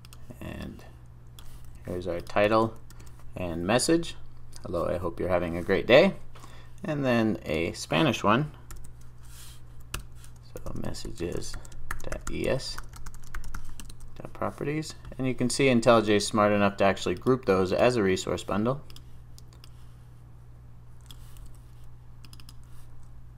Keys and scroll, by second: 2.5 super+v, 3.0 super+s.